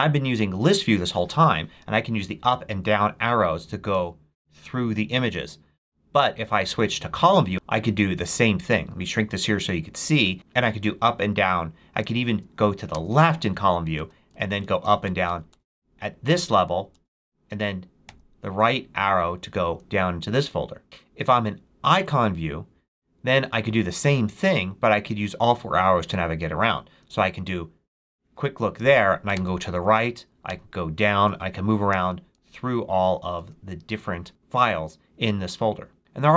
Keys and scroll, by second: 1.2 space, 2.1 Down, 2.7 Down, 3.5 Up, 5.1 space, 7.5 space, 10.3 Return, 10.4 Down, 11.1 Down, 12.8 Left, 14.2 Up, 14.9 Up, 18.0 Right, 26.9 space, 29.2 Right, 30.4 Down, 31.2 Right, 31.8 Left, 32.9 Down, 33.3 Right, 34.2 Right.